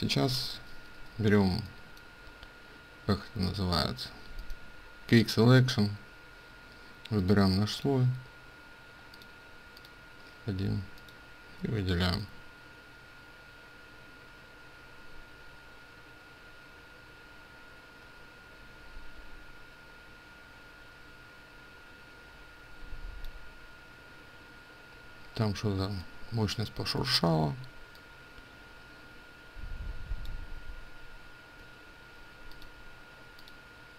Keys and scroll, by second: 10.7 ctrl+space, 25.7 ctrl+space.